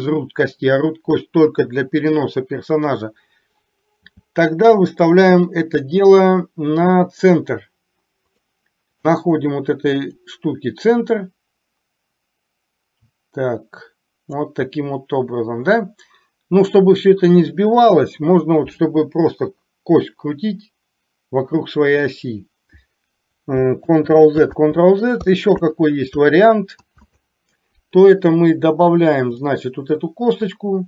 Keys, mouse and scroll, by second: 4.0 g, 9.0 click, 10.3-14.5 drag, 23.9 ctrl+z, 29.4-30.8 drag.